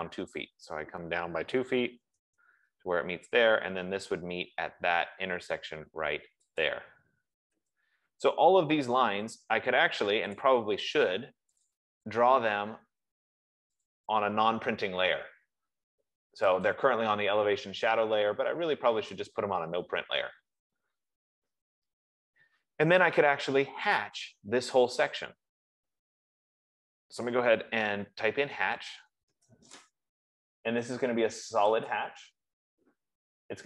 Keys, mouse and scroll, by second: 2.0 typing, 2.2 Return, 7.0 click, 8.1 Return, 10.7 click, 12.1 click, 14.2 click, 19.7 click, 21.8 scroll, 22.4 Escape, 28.6-30.0 typing, 32.3-33.6 drag.